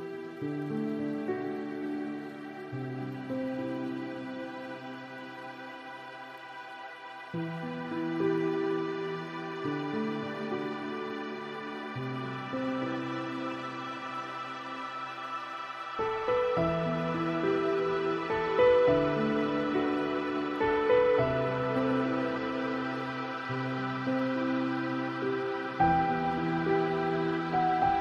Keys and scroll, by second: 5.9 ctrl+a, 9.9 ctrl+d, 26.3 ctrl+space.